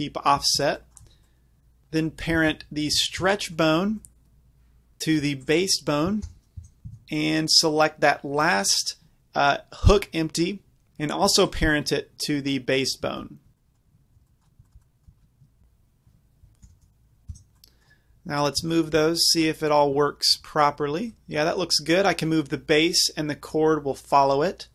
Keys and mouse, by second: 2.8 click, 3.7 click, 4.4 middle click, 4.9 ctrl+p, 4.9 ctrl+z, 6.3 ctrl+p, 7.0 Tab, 13.3 ctrl+Tab, 14.2 b, 15.4 KP_Decimal, 15.5 click, 16.7 ctrl+p, 17.6 middle click, 17.7 drag, 18.8-21.1 middle drag, 20.5 g, 21.1 g.